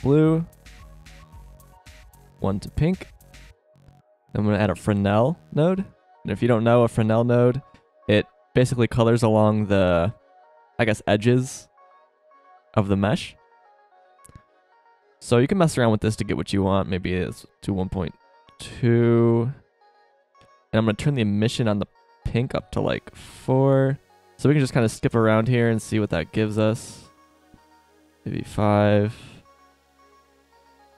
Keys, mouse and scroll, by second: 4.3 shift+a, 7.3-7.6 drag, 14.9 middle click, 15.6-17.9 drag, 19.4 middle click, 29.6 click.